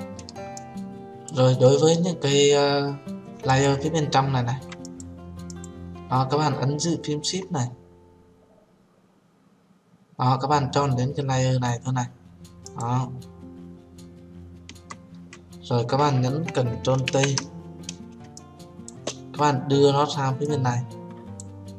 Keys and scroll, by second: 17.4 ctrl+t.